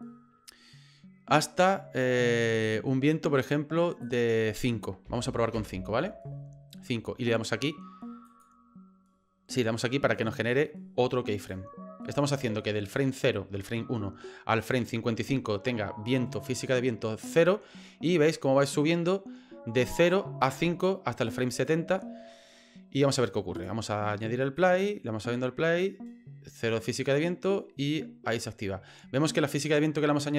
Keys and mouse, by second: 1.6-3.5 drag, 4.0-6.1 drag, 8.3 click, 11.5-21.7 drag, 23.6 click, 24.5 click.